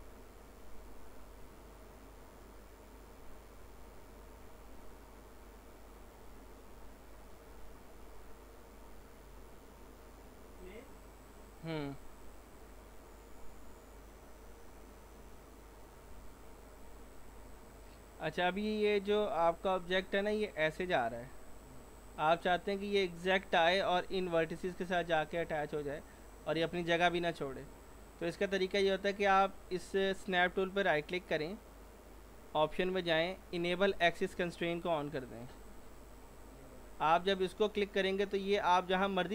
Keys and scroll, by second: 1.0 s, 16.1 ctrl+z, 22.5 ctrl+z, 25.7 ctrl+z.